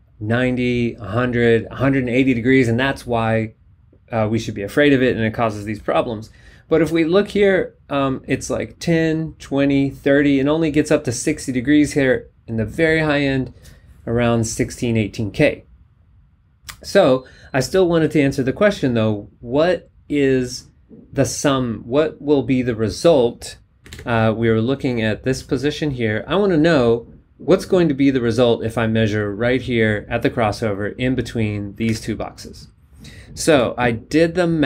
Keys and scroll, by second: 24.0 super+Tab, 32.0 super+Tab, 33.5 b.